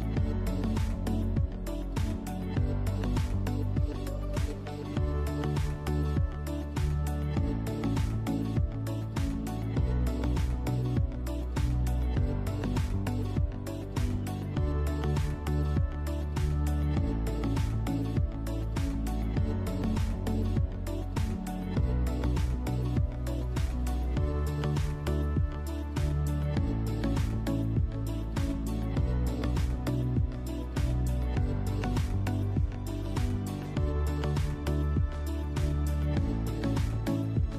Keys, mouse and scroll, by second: 0.2 click, 0.5 scroll down 1, 0.8-4.6 middle drag, 1.2 scroll down 1, 2.3 KP_1, 3.0-3.8 scroll up 4, 4.6 click, 5.0 click, 5.7-9.0 typing, 6.5 click, 7.1 click, 7.8 click, 8.6 click, 9.9 click, 10.3 s, 11.3 click, 11.5 middle click, 12.2 click, 13.6 click, 14.3 click, 14.7 click, 14.9-15.4 scroll up 2, 15.4-17.4 shift+middle drag, 16.0 Delete, 17.4 click, 17.7-19.5 drag, 20.4 Tab, 21.1 click, 22.4-24.4 drag, 24.6 click, 24.8 scroll down 1, 25.1-26.8 shift+middle drag, 26.0-26.5 scroll up 2, 26.5 Tab, 26.8 click, 27.2-30.7 middle drag, 28.2-28.5 scroll up 2, 28.9 scroll down 1, 29.5 Tab, 29.7 click, 30.1 Delete, 30.4 scroll up 1, 30.7 click, 30.8 middle click, 31.2 Tab, 31.7 ctrl+r, 33.7 click, 33.9-37.3 middle drag, 35.4 ctrl+r, 36.2 Escape, 36.8 z, 37.3 ctrl+r.